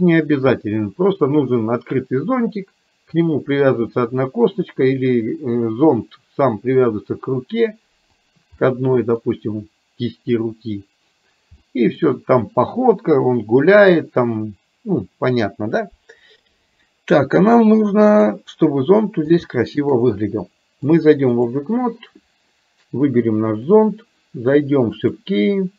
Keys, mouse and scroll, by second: 8.3 click, 8.8 middle click, 11.6 middle click, 18.1 click, 19.0 middle click, 19.6 shift+middle click, 21.0 click.